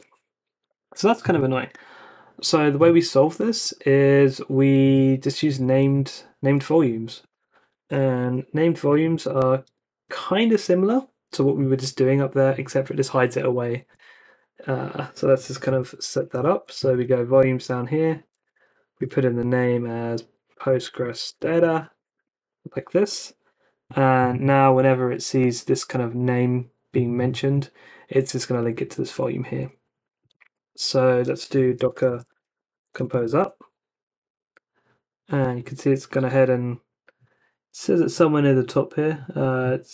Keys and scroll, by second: 4.8 a, 5.3 BackSpace, 5.8 ↺, 7.7-10.0 typing, 15.4-22.7 typing, 23.0 Escape, 31.3-33.6 typing.